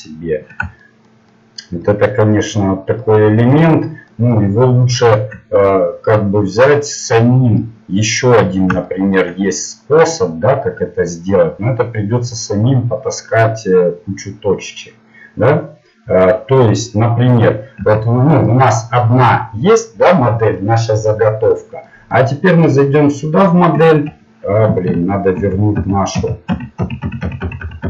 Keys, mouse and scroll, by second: 0.8 middle click, 1.0 middle click, 3.3 middle click, 3.8-5.7 middle drag, 7.0 middle click, 13.9 middle click, 17.8 Tab, 22.8 click, 23.4-24.8 middle drag, 23.9 Tab, 25.4 ctrl+z, 25.8 ctrl+z, 26.3 ctrl+z, 26.5 ctrl+z, 26.8 ctrl+z, 27.0 ctrl+z, 27.4 ctrl+z, 27.6 ctrl+z, 27.8 ctrl+z.